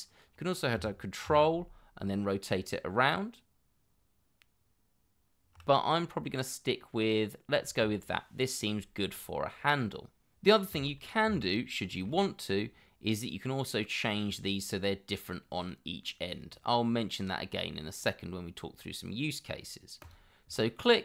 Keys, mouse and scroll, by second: 1.3 ctrl+x, 5.8 scroll down 1, 11.4 ctrl+middle click, 16.7 middle click, 18.8-19.2 scroll up 1, 19.3-19.8 scroll down 1, 20.5 middle click.